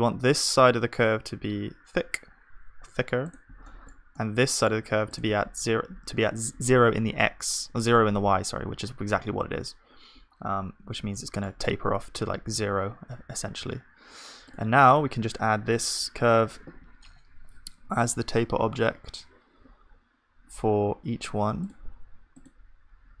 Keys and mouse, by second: 5.1-7.1 drag, 5.1-7.1 right drag, 10.9 Tab, 11.1-15.5 middle drag, 12.6 ctrl+s, 15.5 click, 15.5 right click, 16.4-23.1 middle drag, 23.1-23.2 drag.